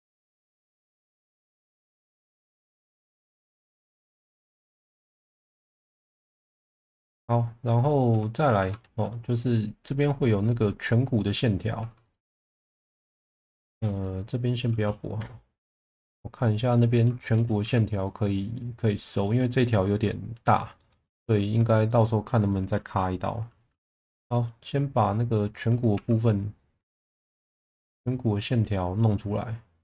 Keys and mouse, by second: 1.1 click, 1.7 click, 3.9-6.9 middle drag, 8.5 2, 8.7 click, 11.7 2, 12.0 click, 13.0 shift+middle drag, 13.6 3, 15.1 Delete, 17.1 shift+middle click, 17.6 2, 17.9 click, 20.7 shift+middle click, 21.8 shift+middle click, 23.8 e, 25.9 2, 26.7 click.